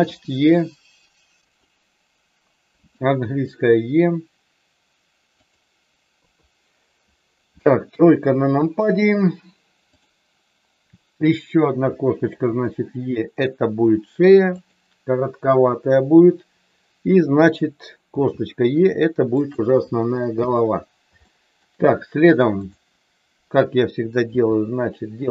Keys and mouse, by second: 0.0 e, 2.7 e, 5.4 click, 6.2 KP_3, 9.9 click, 11.9 e, 14.6 click, 18.1 e, 19.3 click, 21.2 shift+middle click, 22.5 click, 24.2 e.